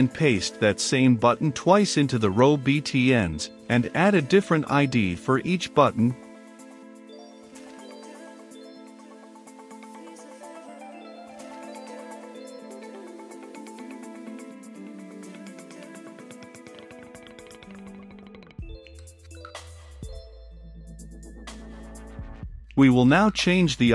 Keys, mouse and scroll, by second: 0.6 click, 1.5 ctrl+v, 3.9-5.1 drag, 5.3 ctrl+v, 8.5-11.6 drag, 11.6-12.7 typing, 12.9 Return, 13.5 click, 14.4-16.4 typing, 16.6 Return, 17.3 click, 18.0-18.9 typing, 19.1 Return, 20.4-21.6 drag, 21.6-23.4 middle drag, 23.4-23.9 drag.